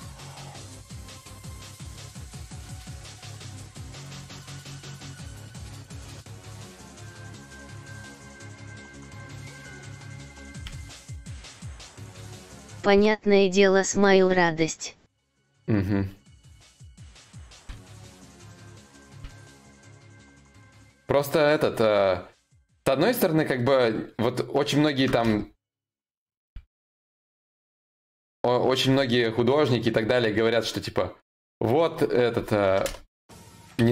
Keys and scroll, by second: 10.3 ctrl+z, 10.5 ctrl+y, 12.5 ctrl+z, 12.5 y, 16.9 ctrl+z.